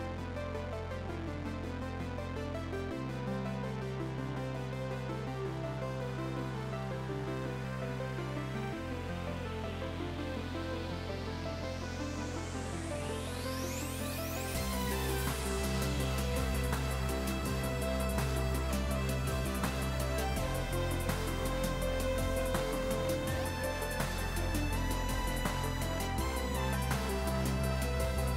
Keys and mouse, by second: 12.9 click, 16.4 click, 18.2 right click, 19.0 click, 24.0 right click, 26.0 click.